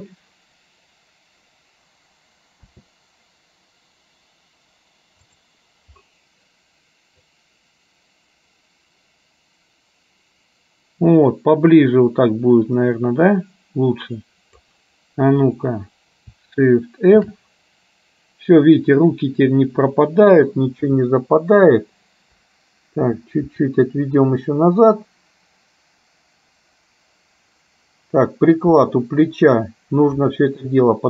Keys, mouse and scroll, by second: 7.3-14.8 drag, 17.3 shift+f.